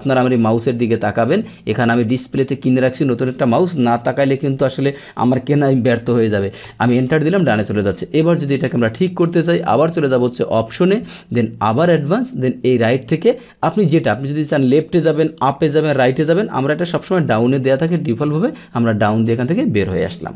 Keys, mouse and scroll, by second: 4.7 click, 6.9 Return, 8.7 click, 10.0 click, 11.8 click, 12.7 click, 16.8 click, 19.0 click.